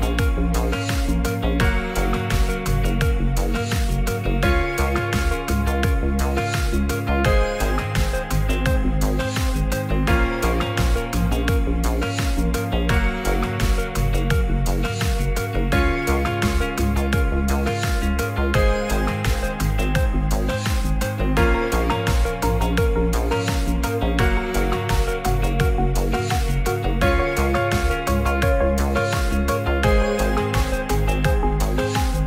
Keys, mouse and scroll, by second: 1.1 alt+middle click, 2.3 s, 2.5 shift+z, 3.4 click, 3.7 g, 4.9 s, 5.0 z, 6.5 click, 7.7 middle drag, 8.5 middle click, 9.2 Tab, 10.3 3, 11.3 middle click, 12.3 shift+d, 13.0 g, 13.1 z, 14.3 shift+s, 15.3 s, 15.5 shift+z, 16.7 click, 16.9 e, 18.3 click, 19.9 shift+s, 20.5 shift+a, 22.3 s, 23.8 click, 24.3 g, 24.3 z, 26.8 click, 27.1 Tab, 27.4 drag, 27.7 middle drag, 28.2 click, 28.6 ctrl+a, 29.7 click, 30.4-31.5 drag.